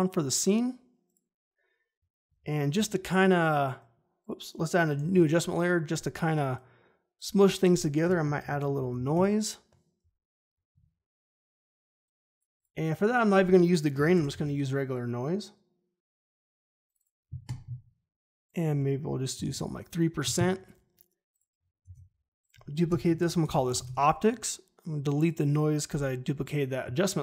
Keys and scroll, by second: 2.7 ctrl+shift+y, 4.9 ctrl+alt+y, 8.0 Return, 8.1-9.4 typing, 13.7-14.8 typing, 19.3 3, 19.4 Return, 21.8 ctrl+d, 22.8 Return, 22.9-24.2 typing, 25.8 Delete.